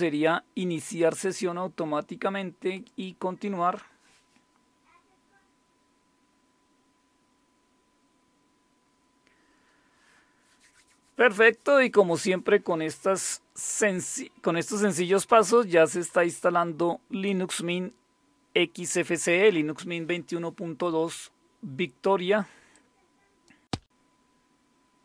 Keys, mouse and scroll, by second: 2.7 click, 22.7 click.